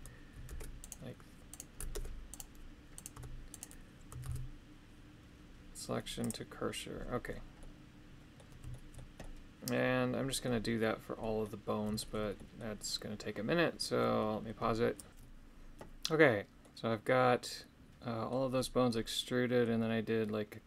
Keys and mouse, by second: 0.4 ctrl+Tab, 0.8 right click, 1.4 right click, 1.9 ctrl+Tab, 2.9 right click, 3.1 Tab, 3.5 right click, 4.2 shift+s, 7.5 middle click, 8.7 shift+middle click, 9.2-10.4 middle drag, 11.1 middle click, 11.9 shift+middle click, 12.3 middle click, 16.6-18.4 middle drag, 18.9 middle click.